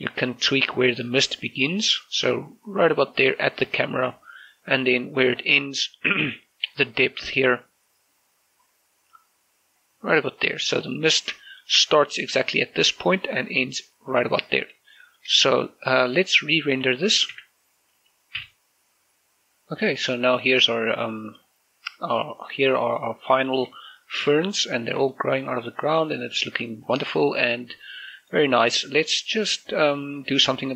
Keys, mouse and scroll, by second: 6.3-10.9 drag, 10.9-11.3 scroll up 1, 11.5 shift+middle click, 11.8 shift+scroll up 2, 14.9-15.3 scroll up 1, 15.3 shift+middle click, 17.4 z, 18.5 F12, 19.4 click, 23.7 click, 23.9 shift+middle click, 24.5 scroll up 1, 25.2 shift+middle click, 26.2 shift+middle click, 26.9 scroll down 1, 27.3 shift+middle click, 27.7 scroll up 2, 28.2 shift+middle click, 28.6 scroll down 2, 28.9 shift+middle click.